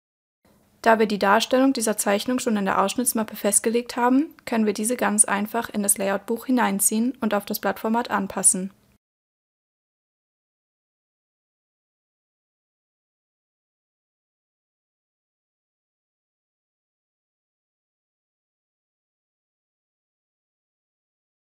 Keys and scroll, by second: 20.7 super+e.